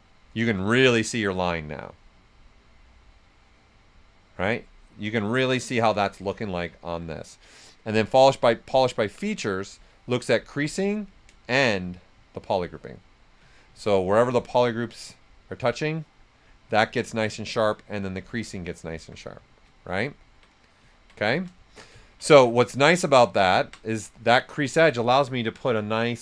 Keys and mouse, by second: 0.3 right click, 1.0 right click, 8.9 click, 10.0 right click, 11.4 shift+f, 12.9 right click, 18.1 ctrl+right click, 18.3 ctrl+right click, 20.0 ctrl+z, 21.2 alt+right click, 21.6 shift+f, 21.9 ctrl+right click.